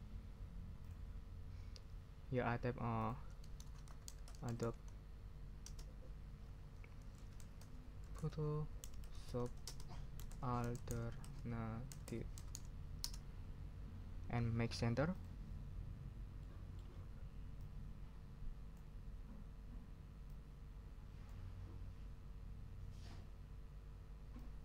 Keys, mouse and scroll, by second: 2.2 ctrl+scroll up 2, 3.6-5.6 typing, 6.9-13.0 typing, 15.1 scroll up 2, 16.4 middle click, 17.6-18.9 drag, 20.3-21.4 drag, 24.4 click.